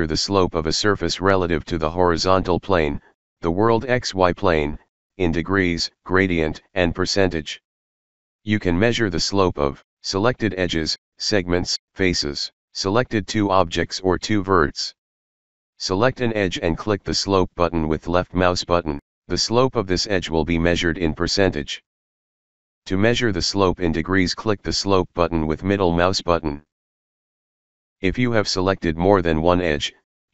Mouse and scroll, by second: 7.5-8.3 middle drag, 9.0 middle click, 9.7 middle click, 9.7 scroll, 10.6 middle click, 10.6 scroll, 12.2-12.7 scroll up 1, 12.7 middle click, 14.0 scroll up 1, 14.0 click, 15.0 click, 16.4 click, 17.6 click, 18.0 middle click, 18.4-18.8 scroll up 1, 20.2 click, 23.5 click, 24.3 click, 27.9 click, 28.7-29.9 ctrl+drag.